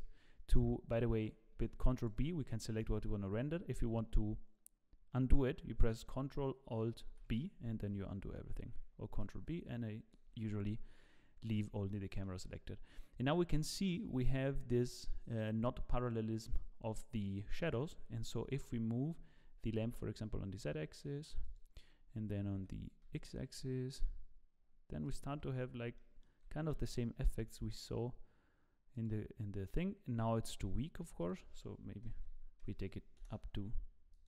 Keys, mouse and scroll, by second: 1.5 ctrl+b, 7.0 ctrl+alt+b, 8.5 ctrl+b, 11.4 scroll down 1, 11.9 shift+middle click, 18.1 g, 22.6 g, 25.4-26.0 scroll down 7, 26.0 shift+middle click, 27.2 g, 31.2 click, 32.2 KP_0, 34.1 click.